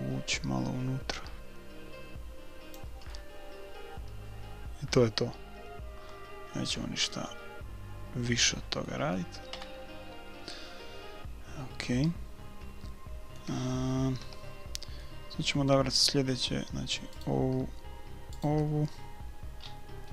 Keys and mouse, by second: 3.2-4.6 middle drag, 4.6 click, 9.5 KP_1, 12.1-13.8 middle drag, 14.3 a, 15.0-16.7 middle drag, 17.3-18.9 right drag, 18.9-20.1 drag, 19.6 middle click, 19.9 right click.